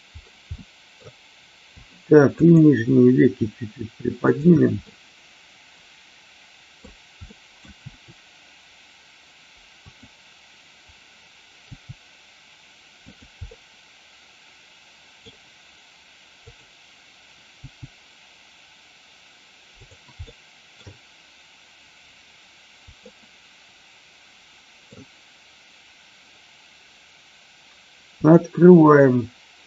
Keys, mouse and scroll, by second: 0.5 middle click, 4.2 shift+click, 4.7-6.7 middle drag, 7.1 middle click, 7.7 r, 9.9 click, 11.6 g, 13.0 click, 13.5-15.1 middle drag, 16.4 click, 17.5 g, 19.8 click, 20.2-20.8 middle drag, 23.0-24.9 middle drag, 28.2 click.